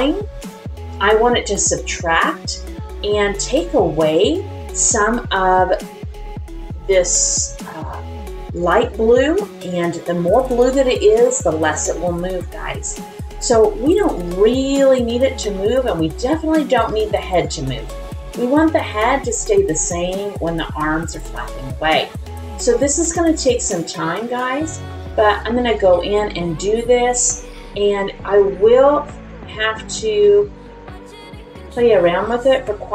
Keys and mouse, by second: 4.8-5.8 middle drag, 8.5 click, 9.7 click, 11.0 click, 12.3-13.5 middle drag, 14.1 click, 14.6 click, 15.5 middle click, 16.5 click, 17.0 click, 17.4 click, 18.1 click, 18.8 click, 19.4 click, 19.8 click, 20.8 middle click, 21.5 click, 22.0 middle click, 22.7 click, 23.1 middle click, 23.8 click, 24.4 click, 24.9 middle click, 25.6 click, 26.3 middle click, 27.1 click, 27.5-28.8 middle drag, 29.3 middle click, 30.2 middle click, 31.0 click, 32.3 click.